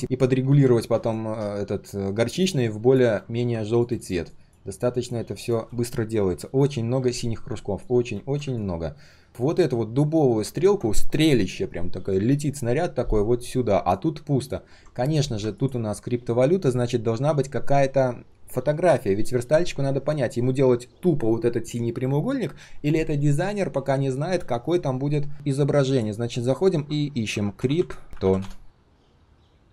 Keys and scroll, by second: 17.3 ctrl+/.